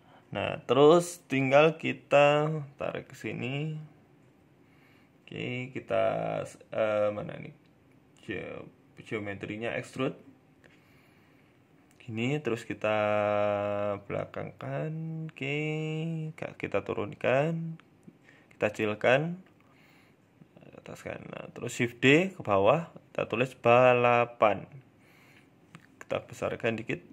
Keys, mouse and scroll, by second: 0.6 g, 1.6 middle click, 1.9 shift+middle click, 2.3 middle click, 3.0 g, 4.0 scroll down 1, 6.7 click, 7.5 click, 9.1-9.9 scroll up 4, 9.3 shift+middle click, 9.8 shift+middle click, 10.2-10.6 scroll down 2, 10.4 middle click, 11.4 g, 14.8 KP_3, 15.0 KP_1, 15.6 shift+middle click, 16.2 g, 17.4 middle click, 17.8 s, 18.8 KP_1, 19.5 g, 20.6 shift+d, 21.8 Tab, 22.1 ctrl+a, 22.7-23.6 typing, 24.4 Tab, 24.8 s, 26.6 g.